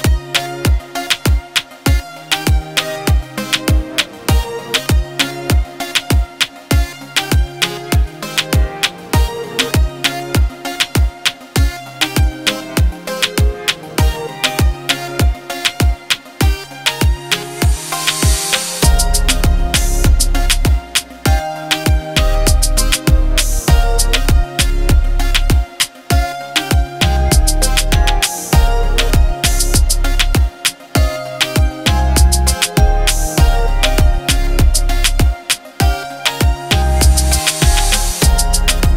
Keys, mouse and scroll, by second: 4.2 click, 4.2-6.9 drag, 9.0 ctrl+0, 11.1 click, 11.3-13.8 drag, 16.2-17.0 alt+drag, 23.7 click, 25.7 click, 27.7 click, 28.5 ctrl+t, 30.3-31.6 alt+drag, 35.4 t, 37.4 click.